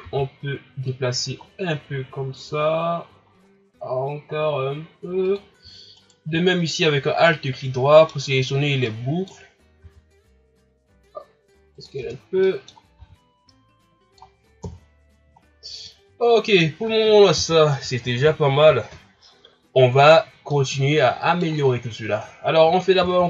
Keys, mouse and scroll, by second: 0.0 s, 6.0 alt+right click, 7.3-9.8 middle drag, 9.8 s, 12.0 Tab, 12.2 scroll down 1, 12.4-13.0 middle drag, 13.0 a, 13.3 scroll down 1, 13.5-14.6 middle drag, 14.6 KP_1, 15.4 scroll down 4, 15.9-18.9 middle drag, 20.1 scroll up 5, 20.5-22.3 middle drag, 22.3-23.2 scroll down 2, 23.2 ctrl+s.